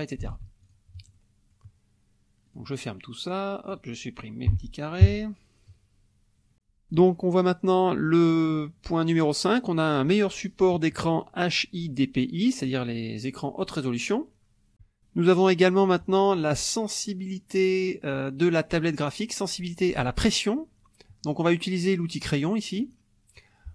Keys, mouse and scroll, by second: 0.3 ctrl+z, 0.6 ctrl+click, 1.1 ctrl+click, 2.5 click, 3.0-3.9 drag, 4.5 Delete, 5.0 KP_5, 22.8 click.